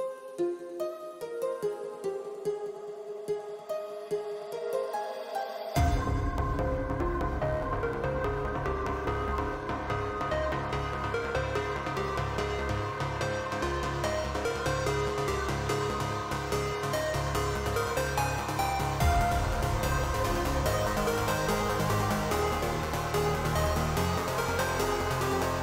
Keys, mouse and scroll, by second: 0.9 s, 2.9 middle click, 3.3 click, 3.9 s, 5.9 g, 6.7 click, 7.5 g, 8.8 middle click, 10.3 click, 11.2 l, 11.8 middle click, 12.4 s, 13.9 shift+click, 15.3 click, 16.0 s, 19.4 click, 19.4 right click, 20.0 click, 20.0 right click, 21.4 shift+r, 21.9 click, 22.6-25.6 typing, 23.0 click, 23.7 click, 24.5 click, 24.7 middle click, 25.4 middle click.